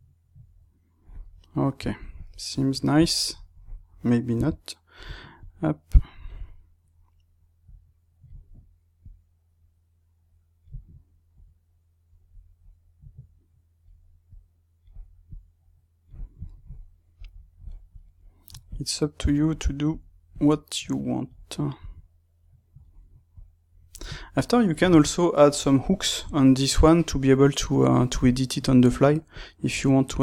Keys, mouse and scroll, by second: 1.2-4.3 middle drag, 4.3 KP_3, 5.3 click, 7.6-9.2 drag, 11.3 click, 12.9 click, 14.2 click, 15.2 click, 16.4-18.6 shift+middle drag, 18.6 click, 19.4 middle click, 20.2 click, 21.7 click, 23.3 click, 24.1-29.2 shift+middle drag, 29.2-30.2 drag.